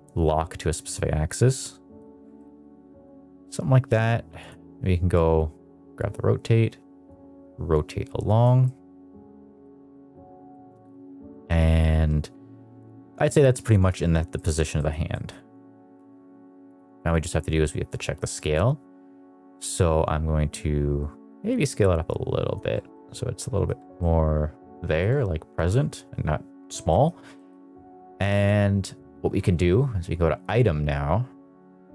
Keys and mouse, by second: 2.3-3.4 middle drag, 4.3 click, 7.0 click, 8.6-9.6 middle drag, 9.8 middle click, 10.4 shift+middle click, 11.2 middle click, 13.1 middle drag, 13.6 middle drag, 14.3 middle click, 14.7 middle drag, 15.0 middle click, 16.6 click, 17.5 middle click, 19.6 click, 20.4 click, 22.8-23.6 middle drag, 23.9-24.9 middle drag, 25.5 middle click, 26.8 middle drag, 27.3 middle drag, 30.4 click.